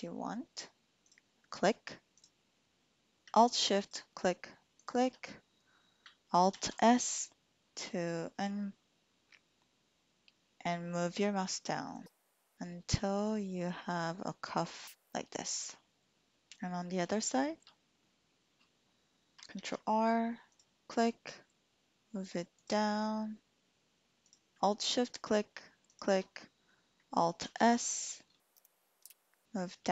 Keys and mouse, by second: 1.1 click, 2.0 click, 3.7 alt+shift+click, 4.7 alt+shift+click, 6.5 alt+s, 14.9 typing, 15.5 click, 16.6 shift+click, 17.4 shift+click, 19.5 ctrl+r, 22.6-24.2 drag, 25.1 alt+shift+click, 25.8 alt+shift+click, 27.4 alt+s, 28.6 Escape, 29.1 alt+s.